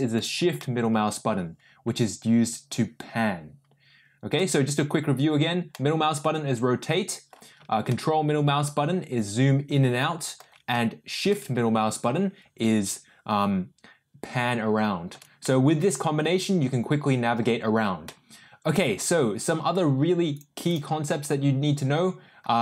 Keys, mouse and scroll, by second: 0.5-4.3 shift+middle drag, 5.7-7.3 middle drag, 7.9-10.3 ctrl+middle drag, 11.2-15.1 shift+middle drag, 15.4-17.3 middle drag, 18.0-19.0 middle drag.